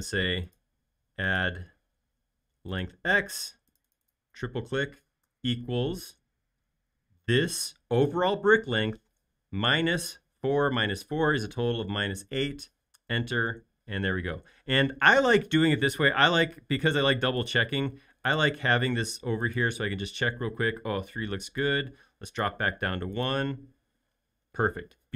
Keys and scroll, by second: 5.6 =, 10.0 -, 11.9-12.7 typing, 13.0 Return.